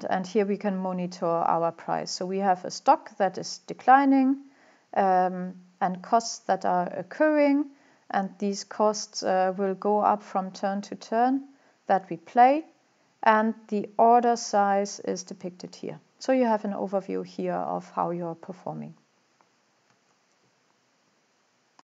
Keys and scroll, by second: 19.9 alt+Tab.